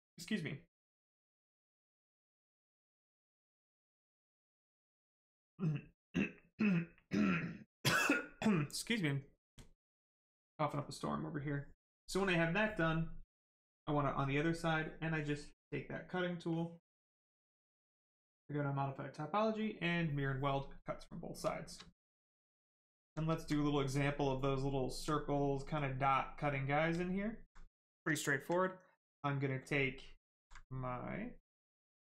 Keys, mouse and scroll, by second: 12.1 click, 12.7 right click, 15.1 click, 18.1 click, 20.6 right click, 21.8 alt+right click, 24.3 alt+right click, 26.9 alt+right click, 29.8 alt+right click.